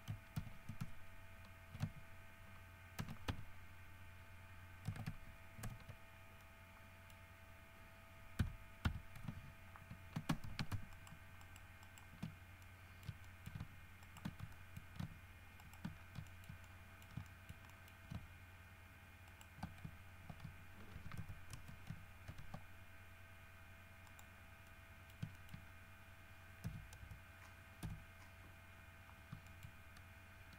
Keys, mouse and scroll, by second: 0.6 ctrl+z, 3.2 ctrl+v, 3.5 ctrl+d, 4.2-4.5 scroll down 2, 5.8 shift+n, 6.6 middle click, 8.6 1, 9.1 2, 10.7 alt+a, 11.1 alt+shift+middle click, 11.6 alt+shift+middle click, 12.1 alt+shift+middle click, 12.5 alt+shift+scroll down 1, 12.8-13.9 alt+shift+middle drag, 14.2 alt+shift+right click, 14.7 alt+shift+middle click, 15.8 alt+shift+middle click, 16.3 alt+shift+scroll down 1, 16.5 alt+shift+middle click, 17.5 shift+middle click, 19.5 alt+shift+middle click, 21.1 shift+e, 21.4 shift+KP_1, 21.7 shift+KP_Enter, 22.5 ctrl+e, 24.3 middle click, 24.9 middle click, 25.7 shift+middle click, 25.9 shift+scroll down 2, 26.9 KP_1, 27.2 KP_5, 28.0 KP_1, 28.9-29.5 scroll up 2, 29.7 shift+middle click.